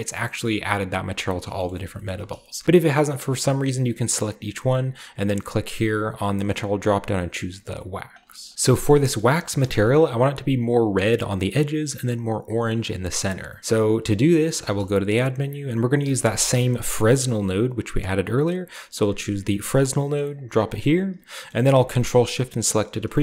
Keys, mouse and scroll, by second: 1.1 click, 2.3-3.0 typing, 3.1 right click, 4.8 click, 7.7 right click, 7.9 right click, 8.3 shift+middle click, 8.5 a, 8.7 middle click, 9.0 shift+middle click, 9.0 shift+scroll up 1, 9.4 shift+middle click, 9.8 shift+middle drag, 10.8-11.6 shift+middle drag, 10.8-11.2 shift+scroll up 1, 13.3 middle click, 13.6-14.7 middle drag, 14.6 shift+a, 15.2 click, 16.0-16.5 typing, 19.0 click, 19.7 click, 20.0-21.4 middle drag, 21.5-22.6 ctrl+shift+middle drag.